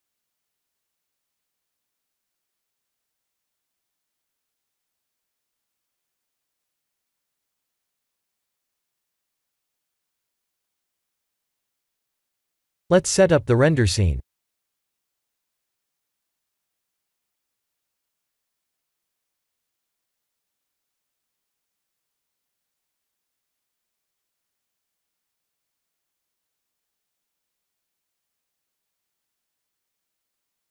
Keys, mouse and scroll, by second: 0.8 click, 1.6 click, 3.1 middle click, 4.9 middle click, 5.8 b, 7.9 shift+click, 8.6 middle click, 9.1 g, 10.7 middle click, 12.9 shift+middle click, 13.3 middle click, 14.4-14.8 scroll down 1, 15.1 ctrl+alt+KP_0, 15.8 shift+`, 21.0 click, 21.9-22.8 scroll down 4, 22.8 click, 23.2 click, 23.9 click, 24.6 shift+a, 26.0 s.